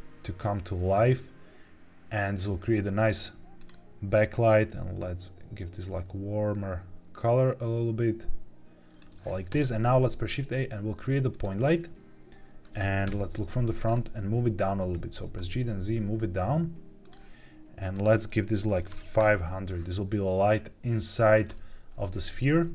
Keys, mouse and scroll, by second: 2.3 click, 3.5 click, 9.5 shift+a, 13.0 KP_1, 13.8-14.8 scroll up 2, 14.8 g, 15.3 z, 16.9 click, 17.7-19.1 drag, 18.8 KP_0, 21.4 KP_0, 22.2 g, 22.5 shift+z.